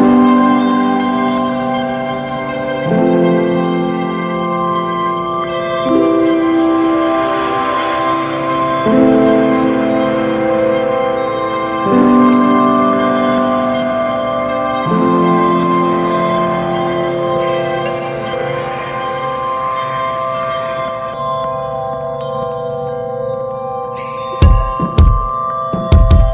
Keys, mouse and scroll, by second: 1.4-2.2 scroll up 1, 2.2-3.8 drag, 5.1 click, 6.6-8.1 drag, 9.5 alt+z, 9.8 click, 10.0 scroll down 2, 10.2-10.6 middle drag, 10.6 ctrl+s, 10.7-11.4 scroll down 1, 11.4 click, 11.7 scroll up 2, 12.5 s, 13.7 alt+middle click, 14.6 alt+middle click, 15.2 alt+middle click, 15.5 alt+z, 15.7 scroll up 2, 16.1 ctrl+s, 16.5-17.3 shift+middle drag, 17.3-18.6 drag, 18.6 r, 22.1 ctrl+s, 22.4 Tab, 22.4 click, 22.6 scroll down 4, 22.8 middle click, 23.3 Tab, 23.5 drag, 23.8 ctrl+s, 24.2 click, 25.7-26.3 drag.